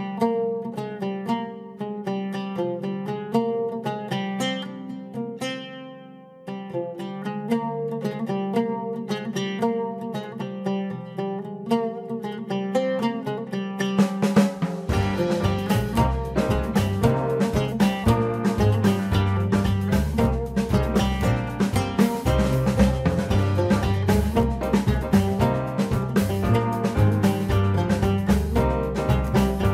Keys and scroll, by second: 24.6 ctrl+t, 27.5 Return.